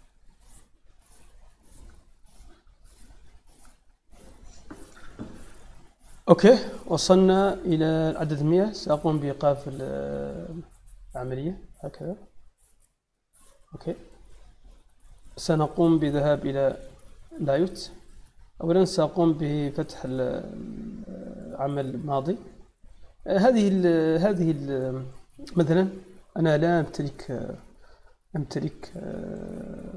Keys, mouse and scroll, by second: 9.2 click, 10.2 click, 11.9 click, 13.3 click, 17.2 click, 19.4 click, 22.0 click, 24.1 click, 26.1-26.5 middle drag, 27.9-28.4 middle drag, 29.3-29.9 middle drag.